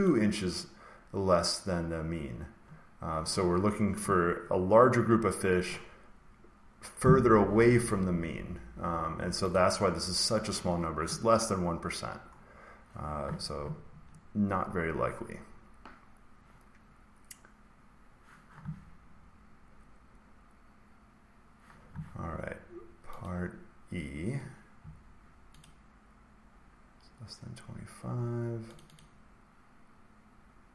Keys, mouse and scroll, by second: 0.0 click, 4.2-6.5 scroll, 9.4 click, 11.2 scroll, 11.3 scroll down 5, 11.9-13.5 scroll, 18.9-20.9 scroll, 23.2 click, 25.5 click, 28.7 click, 28.9 click.